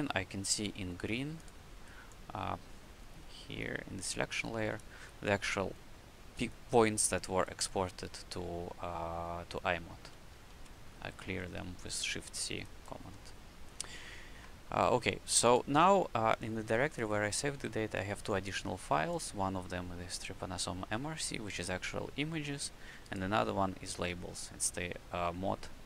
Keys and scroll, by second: 6.9 q, 10.4 shift+c, 13.0 q.